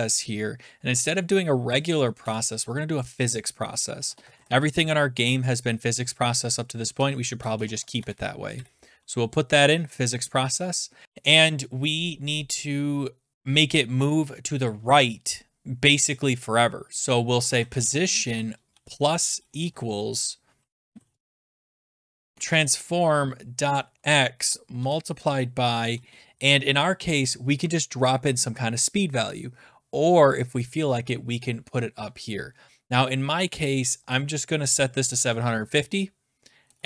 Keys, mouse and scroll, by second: 1.7 click, 2.2 BackSpace, 3.7-5.6 typing, 6.7-9.2 typing, 17.0-19.2 typing, 20.4-21.9 typing, 22.3 Tab, 22.9-25.9 typing, 27.7-28.4 typing, 32.2-32.9 scroll, 34.2 click, 34.8-36.6 typing.